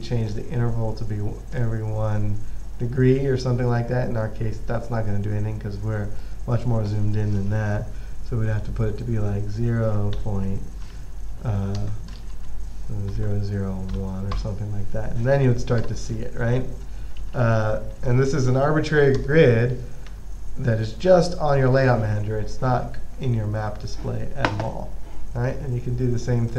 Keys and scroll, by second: 9.0 typing, 10.4-15.4 typing, 16.8-19.0 typing, 20.4 typing.